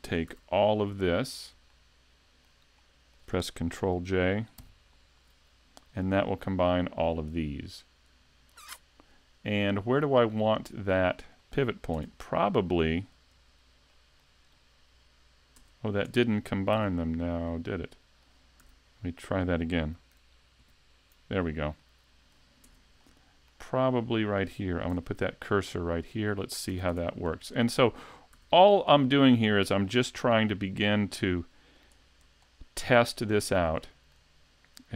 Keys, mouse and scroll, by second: 0.3 a, 0.7 middle click, 1.7 shift+middle click, 2.8 middle click, 4.6 ctrl+j, 6.6 shift+middle click, 7.3 middle click, 10.5 middle click, 11.4 middle click, 12.0 Tab, 13.3 Tab, 13.9 middle click, 14.5 right click, 15.6 Tab, 16.1 Tab, 16.7 a, 17.5 middle click, 18.6 a, 20.6 ctrl+j, 21.8 middle click, 22.7 Tab, 23.0 middle click, 24.1 right click, 24.9 shift+s, 26.7 a, 26.9 Tab, 27.5 middle click, 28.4 a, 28.6-29.0 scroll down 2, 29.0 shift+middle click, 31.8 click, 32.5 shift+middle click, 33.4-33.8 scroll down 1, 33.8 shift+middle click, 34.8 scroll up 2.